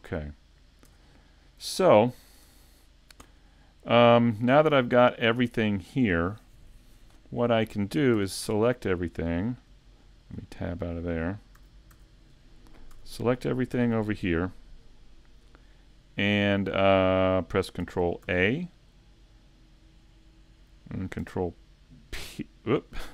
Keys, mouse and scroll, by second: 2.1 middle click, 2.1 scroll down 2, 2.5 a, 11.6 a, 11.9 a, 18.3 ctrl+a, 18.3 shift+middle click, 18.3 scroll up 2.